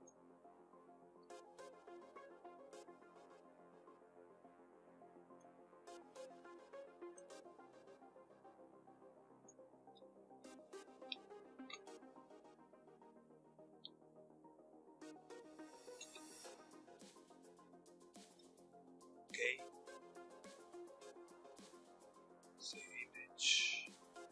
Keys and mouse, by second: 0.8 KP_3, 1.3 click, 3.5 click, 10.0 Tab, 10.5 Tab, 11.1 ctrl+z, 12.1 KP_7, 12.2 click, 13.3 Tab, 14.1 Tab, 14.5-16.4 drag, 15.8 Tab, 17.8 Tab, 18.2 click.